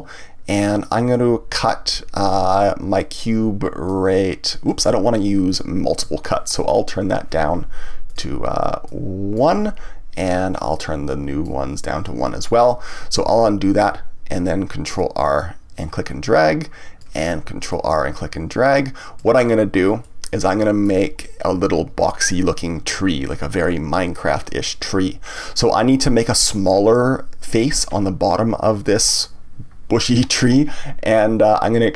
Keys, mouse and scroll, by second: 0.8 click, 3.8-6.9 drag, 8.0 click, 8.8-13.2 drag, 13.2 ctrl+z, 15.0-20.0 drag, 20.0-23.1 middle drag, 25.4-28.4 middle drag.